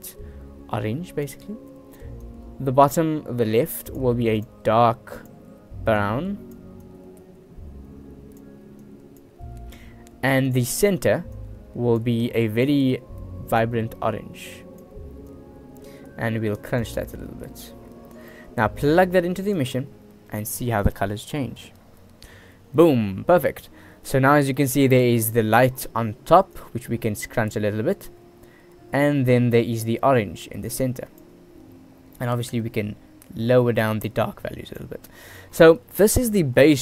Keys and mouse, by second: 2.4-4.1 middle drag, 5.3 middle click, 10.6-12.1 drag, 12.7-13.7 drag, 16.7 click, 17.3-17.8 drag, 19.1-19.9 drag, 21.5 ctrl+s, 28.2 click, 28.3-29.5 middle drag, 29.5-30.7 drag, 31.6-32.4 middle drag, 33.3 click, 33.8 click, 35.9 middle click.